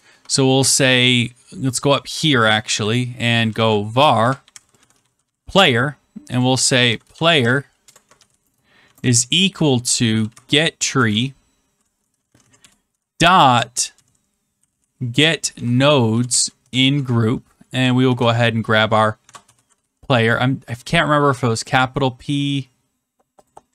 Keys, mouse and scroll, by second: 1.8 click, 2.7 Right, 3.3-11.5 typing, 6.3 click, 12.1 Down, 12.2 Down, 12.5 Return, 12.8-15.3 typing, 16.4-17.1 typing, 18.6-20.2 typing, 21.7 click, 23.4 click.